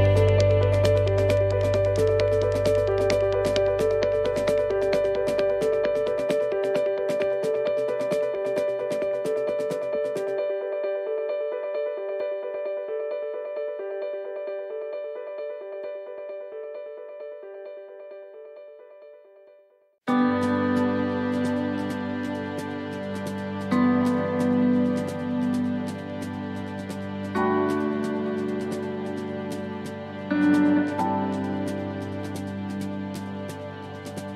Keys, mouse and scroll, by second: 0.8 l, 0.8 x, 3.1 l, 4.6 x, 6.2 shift+middle click, 6.8 scroll down 1, 8.1 click, 10.5 right click, 11.7 click, 14.7-15.1 scroll up 3, 15.2 shift+middle click, 15.7 scroll up 2, 16.1 middle click, 17.3 middle click, 17.5 shift+middle click, 17.6-18.3 scroll down 7, 19.0-19.4 scroll up 4, 20.5 shift+d, 22.7 click, 25.3 shift+middle click, 26.0 middle click, 26.7 shift+middle click, 27.3 scroll down 2, 27.7 middle click, 28.1 scroll down 1, 28.4 middle click, 31.3 scroll up 3, 31.8 shift+middle click, 32.5 scroll up 1, 32.9 middle click.